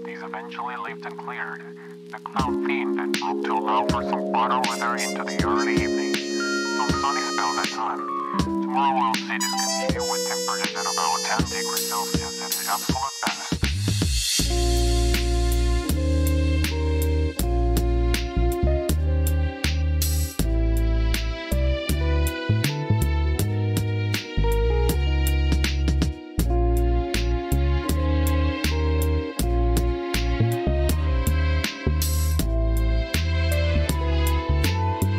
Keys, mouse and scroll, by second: 0.9-1.9 drag, 3.5 s, 4.2 click, 4.7 KP_1, 5.9 shift+middle click, 6.5 g, 7.8-8.2 shift+middle drag, 8.7 s, 8.9 x, 10.5 click, 11.0 s, 11.6 click, 12.0-12.5 middle drag, 12.7 shift+middle drag, 13.1 Tab, 16.5 click, 20.2 click, 21.0 k, 24.3 k, 26.0 middle click, 29.2 ctrl+r, 30.8 ctrl+b, 32.8-33.9 ctrl+drag.